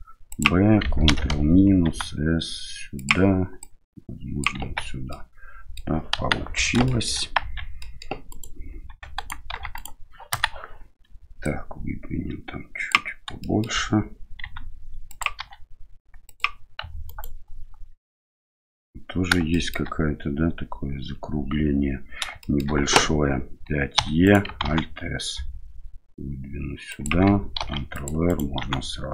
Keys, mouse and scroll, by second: 1.8 s, 3.6 click, 4.6 Tab, 5.1-5.7 middle drag, 6.1 KP_1, 6.8 shift+middle click, 7.4 Tab, 7.8 middle click, 8.3 right click, 8.8 4, 9.1 right click, 9.5 3, 9.7 right click, 10.3 KP_1, 11.4-12.9 drag, 13.5 shift+middle click, 14.4 s, 15.4 e, 17.0 alt+right click, 19.5 shift+middle click, 22.4 shift+middle click, 23.9 e, 24.6 alt+s, 27.6 ctrl+r, 28.6 s.